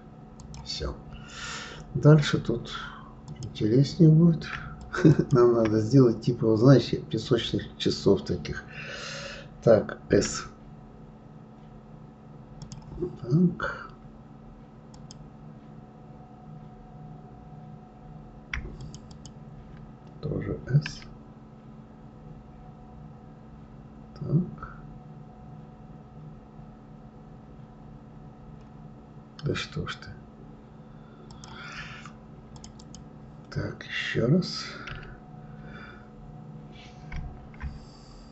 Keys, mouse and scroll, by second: 1.1-2.7 scroll up 1, 3.2 click, 4.8 shift+click, 5.1 shift+click, 14.9 click, 18.8 shift+click, 19.1 shift+click, 20.8 s, 32.5 click, 32.8 click, 34.9 s.